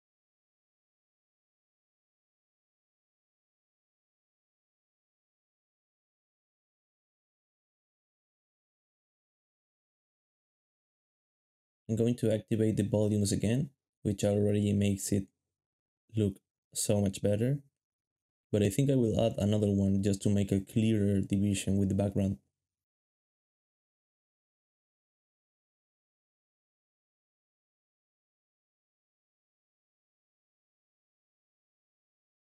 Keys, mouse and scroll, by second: 5.0 3, 6.1 shift+scroll up 1, 6.2 shift+scroll down 2, 6.3 shift+scroll up 1, 6.6 shift+middle click, 7.3 a, 11.0 o, 11.7 shift+middle click, 12.0 shift+middle click, 12.5 alt+shift+a, 13.4 alt+a, 14.2 alt+shift+z, 14.2 alt+shift+z, 14.3 alt+shift+z, 14.5 alt+shift+z, 16.3 shift+middle click, 20.2 alt+d, 20.5-24.3 typing, 24.7 ctrl+b, 25.5 g, 28.3 ctrl+b.